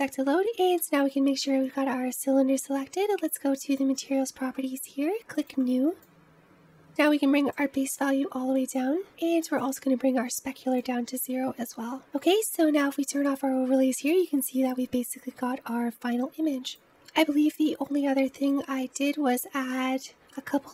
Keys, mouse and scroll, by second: 4.0 click, 6.6 click, 7.3 click, 10.3-11.9 drag, 12.8 click, 18.4 click, 19.5 click, 20.0 scroll down 2, 20.3 middle click.